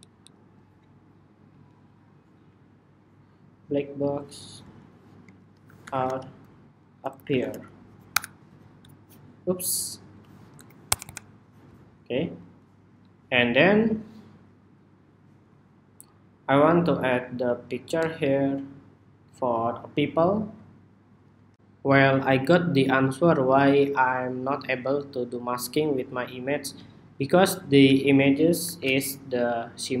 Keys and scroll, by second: 0.0 alt+Down, 1.0 alt+Down, 8.1 Escape, 11.2 ⟲, 28.3 shift+super+y.